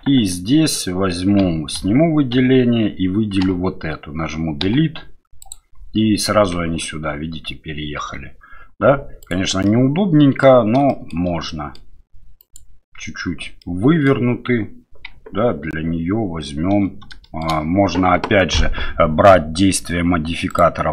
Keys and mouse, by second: 1.4 a, 1.7 a, 2.3 a, 3.4 l, 4.6 Delete, 6.7 Tab, 9.2 click, 9.6-10.4 middle drag, 10.9 shift+middle drag, 11.5-11.8 middle drag, 12.4 right click, 13.6-14.1 middle drag, 15.2 Tab, 17.2 shift+middle click, 20.5 click.